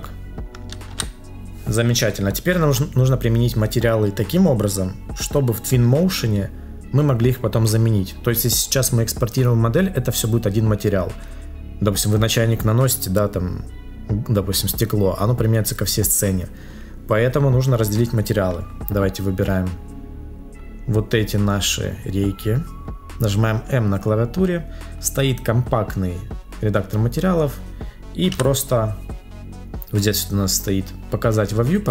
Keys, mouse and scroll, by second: 0.9 ctrl+s.